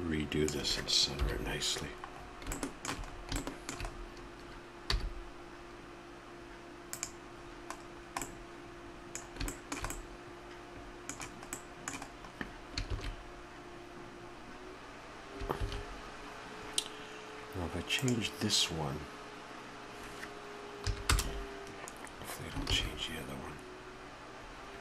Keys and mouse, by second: 13.0 shift+z, 17.1 shift+z.